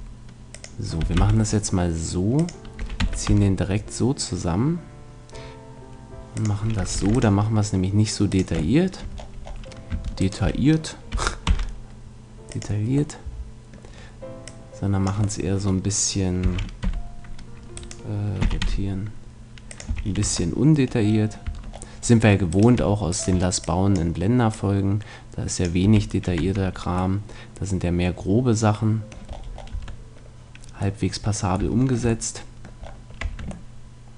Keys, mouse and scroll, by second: 0.6-2.4 drag, 1.1 s, 2.8-4.3 drag, 2.8 e, 6.5-8.2 drag, 7.0 ctrl+r, 8.5 click, 8.8-10.2 middle drag, 11.1 s, 12.7-16.4 drag, 13.2-14.6 middle drag, 16.4 s, 17.9-19.6 right drag, 18.4 r, 19.9 a, 20.2 Tab, 21.4 Tab, 22.5-24.4 right drag, 23.8 click, 25.0-26.2 drag, 25.8 a, 26.4 Tab, 27.2-28.4 middle drag, 29.7 Tab, 31.0-32.9 middle drag, 33.2 Tab.